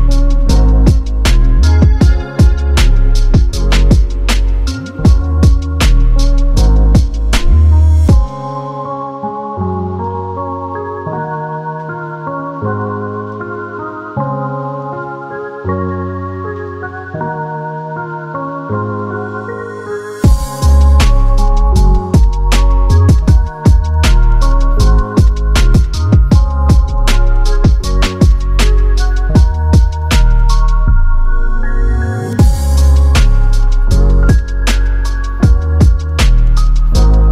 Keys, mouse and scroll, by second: 0.3 scroll up 3, 0.6 5, 0.6 Return, 1.6 typing, 2.7 scroll down 2, 2.8-4.1 typing, 4.1 scroll down 3, 4.4 middle click, 4.8 middle click, 5.9 middle click, 6.2 space, 6.9 double click, 7.2-7.7 scroll down 10, 7.7-8.4 scroll up 5, 8.4 double click, 8.4 double click, 8.5 right click, 9.6-10.5 typing, 10.2-10.5 scroll down 12, 10.6 scroll up 10, 11.5 scroll down 11, 11.9-12.7 typing, 13.4 Delete, 14.0 Delete, 15.1 Delete, 15.6 ctrl+z, 15.9 double click, 17.0 Delete, 17.2 scroll down 5, 17.5 middle click, 17.8 scroll up 4, 18.1 middle click, 18.9 middle click, 19.6 scroll down 2, 19.8 middle click, 20.4-20.7 scroll up 4.